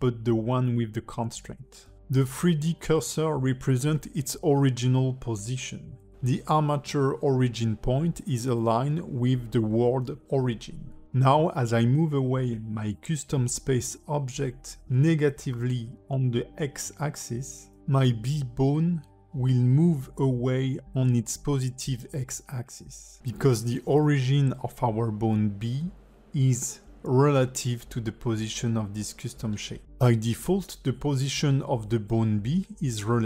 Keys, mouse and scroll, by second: 1.3 h, 2.1 click, 3.1 ctrl+Tab, 7.5 click, 18.2 scroll down 1, 18.5 alt+middle click, 19.2 g, 24.4 shift+middle click, 24.9 ctrl+middle click, 25.7 shift+middle click.